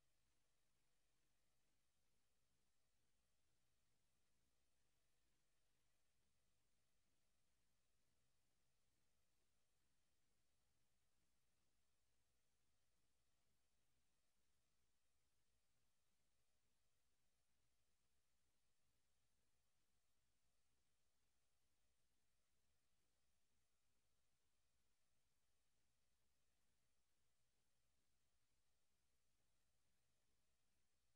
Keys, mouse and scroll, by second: 1.3 click, 4.7 Escape, 5.8 click.